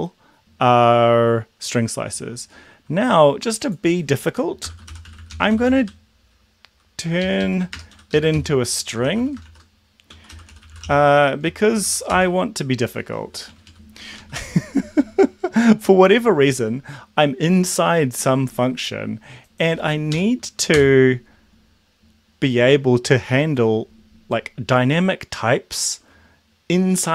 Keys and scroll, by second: 4.5-6.0 typing, 7.2 ctrl+shift+Left, 7.7-12.2 typing, 7.9 End, 8.0 Left, 13.1 Down, 13.5 Down, 13.7 Down, 14.1 Up, 20.1 Up, 20.8 Return.